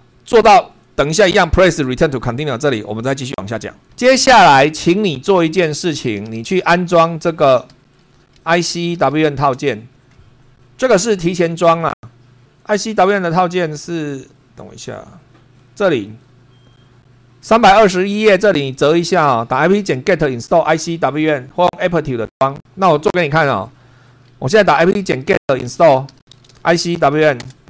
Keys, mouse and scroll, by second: 23.6 super+2, 24.4-27.5 typing.